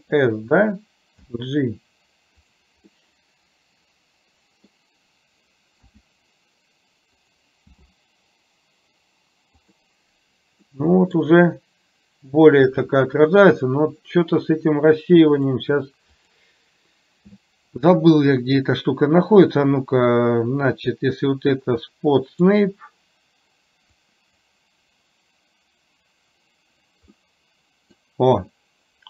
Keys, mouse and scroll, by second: 1.3 g, 3.2-4.8 middle drag, 5.9 s, 7.9 g, 10.8-11.4 middle drag, 15.4 click, 16.3 click, 20.6-22.6 drag, 24.1 click, 27.3-28.2 middle drag.